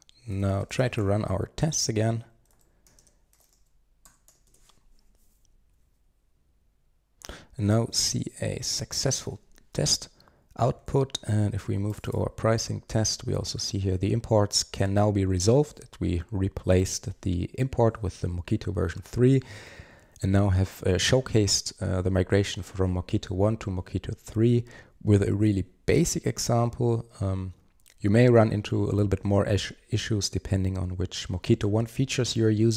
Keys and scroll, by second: 10.9 super+1.